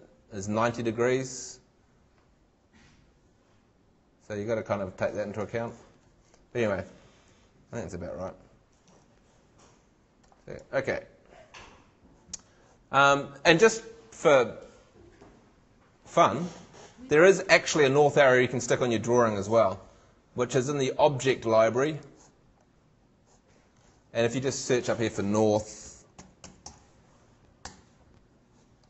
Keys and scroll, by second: 8.9 shift+super+Tab, 25.3-27.1 typing, 27.6 shift+Return.